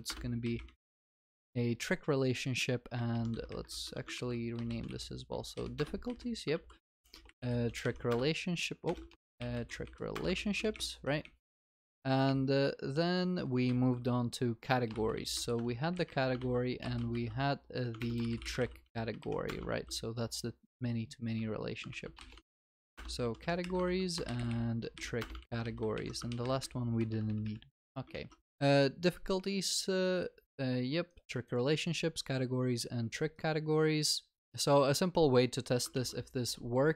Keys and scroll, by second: 0.0 ctrl+w, 4.2 ctrl+w, 8.9 ctrl+BackSpace, 10.3 Return, 10.4 ctrl+s, 15.5 Return, 16.4 ctrl+w, 18.3 ctrl+BackSpace, 19.7 ctrl+s, 22.9 Return, 23.8 ctrl+w, 25.5 ctrl+s, 25.9 ctrl+y, 26.4 ctrl+s, 28.1 ctrl+alt+shift+l, 28.5 ctrl+s, 36.0 ctrl+s.